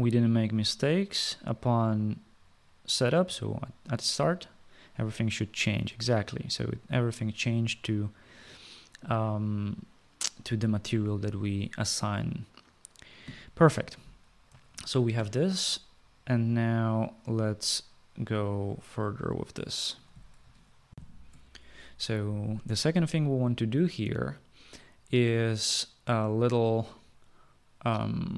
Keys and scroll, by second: 14.8 ctrl+s, 21.1 shift+F9.